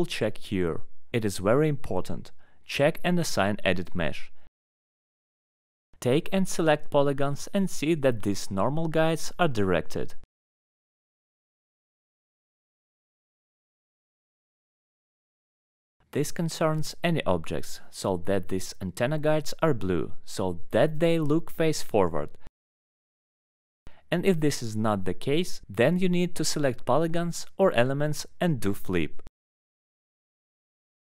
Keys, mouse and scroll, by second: 0.2 scroll, 0.8 scroll, 1.0 alt+middle click, 1.2 alt+middle click, 2.9 click, 3.8 alt+middle click, 4.2-5.2 scroll down 5, 6.3 scroll, 6.9 click, 7.0 right click, 7.5 scroll, 7.9 alt+middle click, 9.6 click, 10.1-10.4 scroll, 11.0 alt+middle click, 11.1 scroll, 11.7 click, 12.0 scroll up 8, 13.2 scroll, 13.8 alt+middle click, 13.9 scroll, 14.2 alt+middle click, 14.3 alt+middle click, 14.6 middle click, 14.7 middle click, 15.1 alt+middle click, 15.9 click, 16.2 alt+middle click, 16.3 middle click, 16.7 click, 17.1 middle click, 18.0 click, 19.3 click, 20.0 middle click, 20.6 middle click, 21.2-21.5 scroll up 5, 22.0 click, 22.1 scroll down 5, 22.5 scroll, 23.1 right click, 24.0 alt+click, 24.1 scroll down 3, 24.3 alt+middle click, 24.3 scroll up 4, 24.5 scroll, 24.7 alt+middle click, 24.9 middle click, 25.2 alt+middle click, 25.5 middle click, 26.6 click, 27.5 alt+middle click, 28.3 right click, 29.6 click, 30.0 middle click.